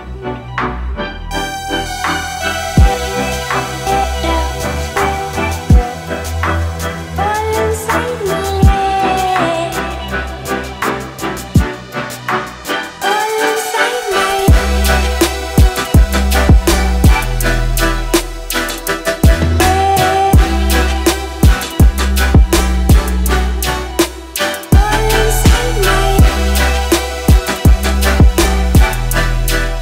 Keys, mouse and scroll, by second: 2.9 shift+Right, 3.9 typing, 5.7 click, 9.2 click, 20.4 click, 20.9 ctrl+c, 21.4 click, 25.8 ctrl+v, 26.3 click.